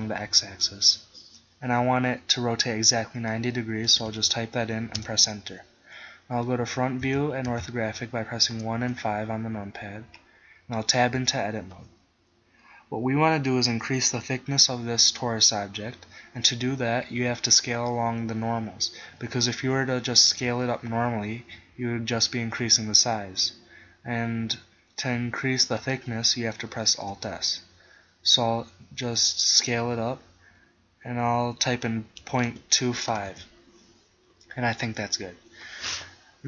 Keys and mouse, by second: 7.0 KP_1, 7.6 KP_5, 11.2 Tab, 20.5 s, 25.9-27.0 right drag, 27.0 alt+s, 35.9 middle click.